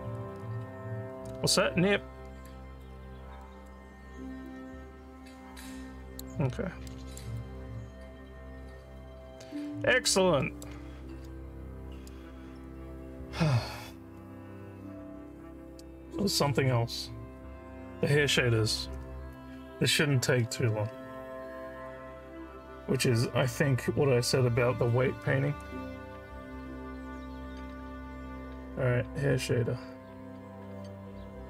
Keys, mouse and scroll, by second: 1.5 alt+middle click, 2.9 scroll up 2, 3.4 alt+middle click, 4.5-6.2 alt+drag, 6.9 alt+middle click, 7.4-10.1 alt+drag, 10.4 alt+middle click.